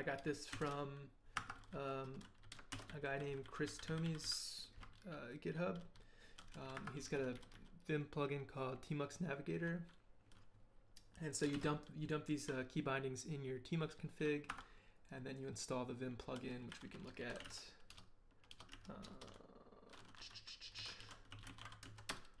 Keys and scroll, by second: 0.5 shift+v, 1.4 Escape, 1.6-3.6 typing, 6.2 k, 6.5 k, 6.7 Escape, 7.0 k, 7.1 k, 9.5 k, 11.3-12.6 typing, 14.5 Escape, 16.3-18.7 typing, 19.0 Return, 20.5-22.4 typing.